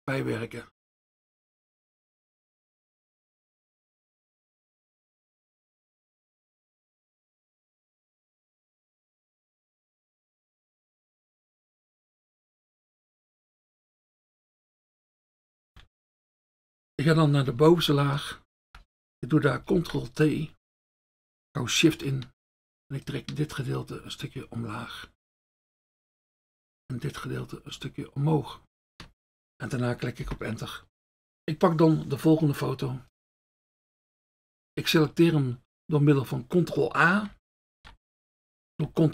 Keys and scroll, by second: 18.7 F1, 19.7 ctrl+t, 30.3 Return, 37.8 ctrl+a.